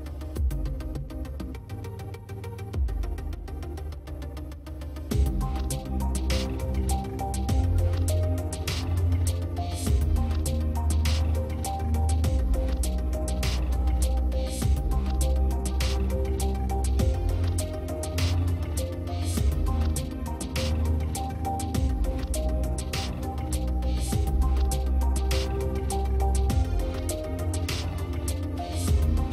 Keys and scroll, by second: 5.9 space, 20.3 space, 24.4 space, 27.1 space.